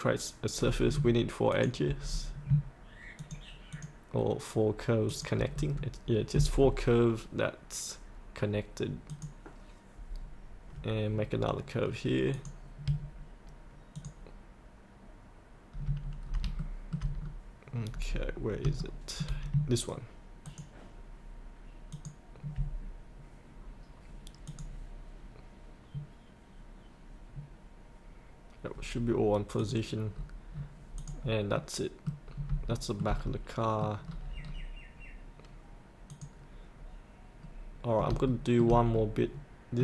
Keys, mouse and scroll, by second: 1.5 ctrl+click, 2.0-2.5 scroll up 1, 3.2 ctrl+click, 5.0 ctrl+click, 5.5 scroll up 1, 9.0 click, 11.3 scroll down 1, 12.3 click, 13.9 ctrl+click, 16.2 scroll up 1, 16.5 shift+middle click, 17.1-17.9 scroll down 1, 17.9-18.3 scroll up 1, 18.3 scroll down 1, 18.8 shift+middle click, 20.4 ctrl+click, 21.9 ctrl+click, 24.4 click, 30.1-30.5 scroll up 1, 31.0 click, 31.7 middle click, 32.2 scroll up 1, 32.6 shift+middle click, 33.2 middle click, 33.9-34.4 scroll down 1, 34.9-36.0 scroll up 1, 36.0 click, 36.7-37.3 scroll up 1, 38.2 shift+middle click, 38.9-39.8 middle drag.